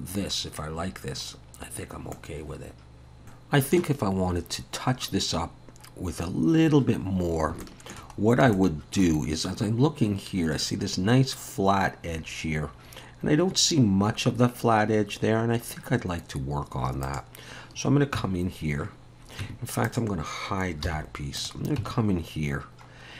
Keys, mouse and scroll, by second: 1.7 scroll down 1, 2.1 middle click, 6.9-7.5 scroll up 1, 7.6 shift+middle click, 8.2 scroll up 1, 8.5 shift+middle click, 15.2-16.2 scroll down 1, 16.2-17.0 scroll up 1, 17.0 click, 18.2 Tab, 18.5-19.1 scroll up 1, 19.1 scroll down 1, 19.4 Tab, 19.8 click, 20.8 h, 21.4 click, 21.8 Tab.